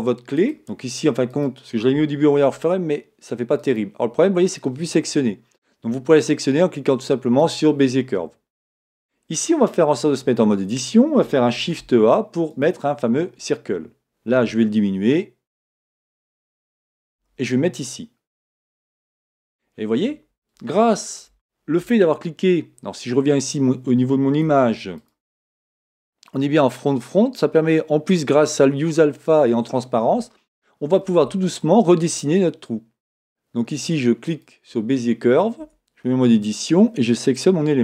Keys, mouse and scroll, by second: 10.1 Tab, 14.4 s, 17.2 g, 19.5 scroll up 1, 20.8-25.1 shift+middle drag, 24.5 Tab, 25.1 click, 35.6 Tab, 37.4 click.